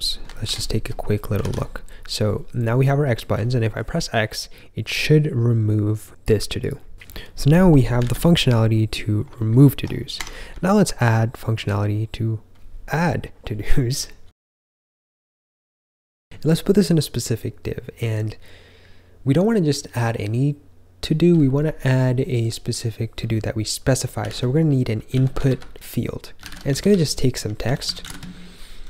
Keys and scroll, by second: 0.7 ctrl+j, 1.3 super+r, 8.0 super+r, 9.4 ctrl+k, 9.7 ctrl+k, 10.1 Escape, 10.4-11.0 k, 12.8-14.7 typing, 16.2 typing, 23.9-28.8 typing.